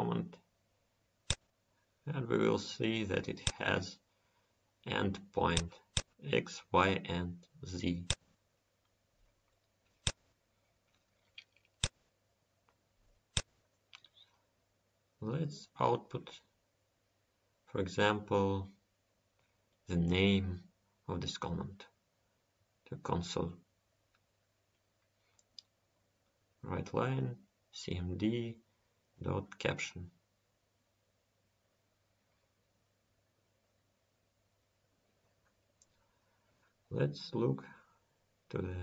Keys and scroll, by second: 33.3 ctrl+s.